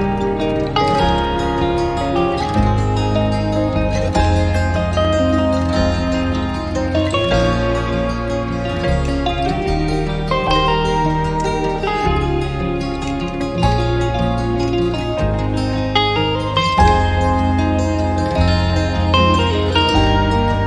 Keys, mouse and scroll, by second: 2.1 alt+middle click, 2.4 alt+click, 3.0 scroll up 1, 3.4 alt+click, 3.6 alt+middle click, 3.9 alt+click, 6.2 double click, 9.6-10.0 scroll down 1, 15.9 scroll up 1, 16.0 alt+middle click, 16.4 scroll down 1, 16.7 alt+click, 18.2 alt+middle click, 18.4 alt+click.